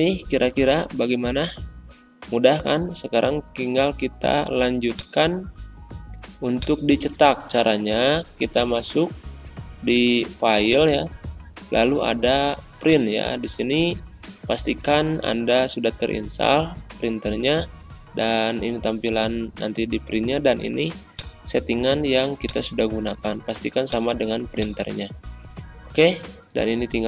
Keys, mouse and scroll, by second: 0.7-1.4 typing, 2.4 ctrl+scroll down 1, 5.0 click, 8.3 ctrl+End, 10.6 click, 12.8 click, 21.1 click.